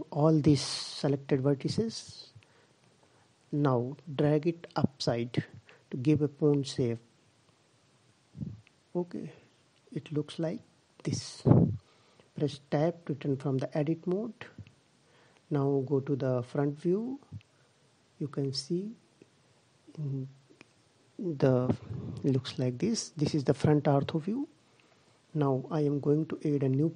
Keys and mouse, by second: 1.7 g, 11.0 Tab, 16.1 click, 16.3 middle click.